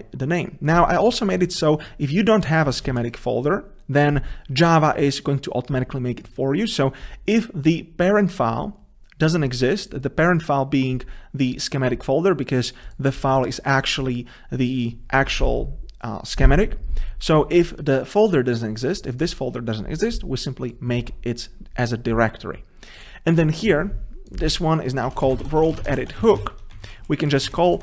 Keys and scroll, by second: 27.1 ctrl+shift+Left.